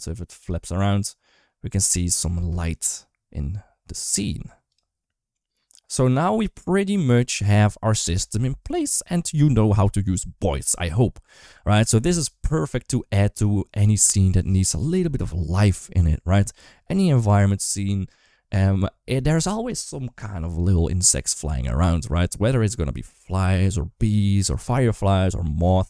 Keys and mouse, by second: 0.1 space, 1.7 space, 2.1 space, 3.8 click.